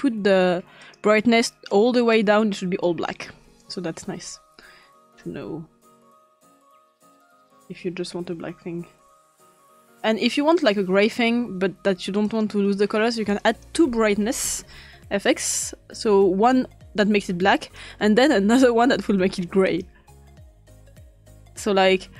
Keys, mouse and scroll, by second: 0.9-1.8 drag, 2.2-3.3 drag, 3.7 click, 5.2-6.6 drag, 8.9-11.7 drag, 12.0-14.8 drag, 14.0-15.3 typing, 16.1-19.0 drag, 19.7-20.6 drag, 20.8 click.